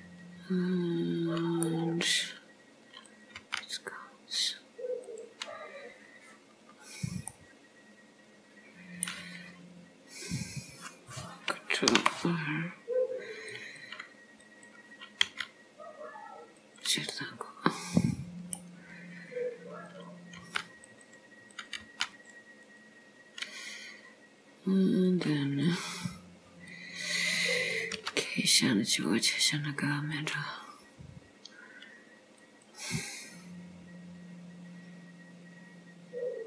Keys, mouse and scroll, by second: 2.0-3.1 scroll up 1, 3.1 click, 3.5 g, 5.5 scroll down 3, 7.4 middle click, 10.3 click, 12.0 ctrl+r, 15.3 s, 17.2 middle click, 18.9 scroll up 2, 19.9 click, 20.5 g, 21.6 click, 21.9 g, 22.7 click, 25.2 click, 26.9 click, 28.0 k.